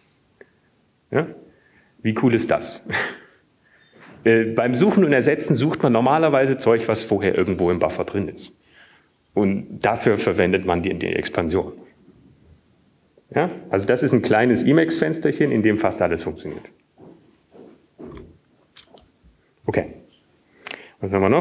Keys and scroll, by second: 21.2 ctrl+g.